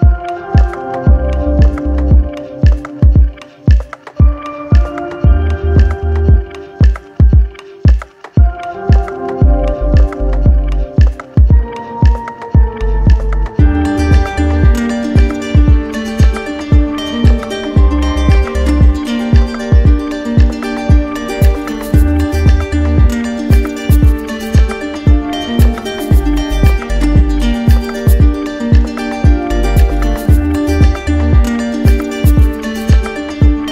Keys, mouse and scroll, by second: 0.9 ctrl+click, 1.8 alt+click, 2.5 click, 5.2 ctrl+click, 9.6 ctrl+click, 13.0 ctrl+click, 17.5 ctrl+click, 19.6 ctrl+click, 22.4 click, 24.8 click, 27.3 click, 28.0 ctrl+z, 30.7 click, 32.1 ctrl+click.